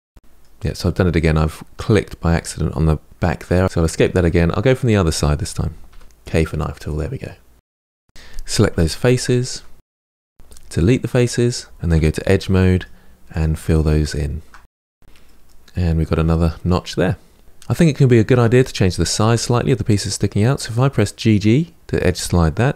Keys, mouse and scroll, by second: 0.1-2.8 middle drag, 4.0-5.7 middle drag, 5.7 k, 6.8-8.0 middle drag, 8.2 3, 8.4 click, 8.7 shift+click, 9.1 KP_Decimal, 9.2 middle click, 9.6 shift+click, 9.9 Delete, 10.7-11.1 scroll down 2, 11.1 2, 11.2 middle click, 11.7 click, 11.9 shift+click, 12.3 middle click, 13.0 f, 13.1 middle click, 13.6 click, 14.2 f, 14.4 middle click, 14.7-15.5 scroll down 9, 15.5 middle click, 16.0-16.5 scroll down 3, 16.5 middle click, 17.4 click, 22.6 1.